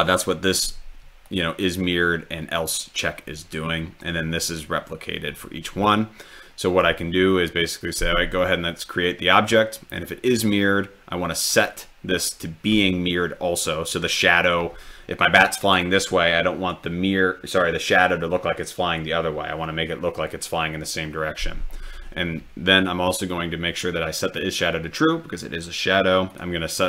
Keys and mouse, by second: 1.3 drag, 2.6-3.2 drag, 26.3 click.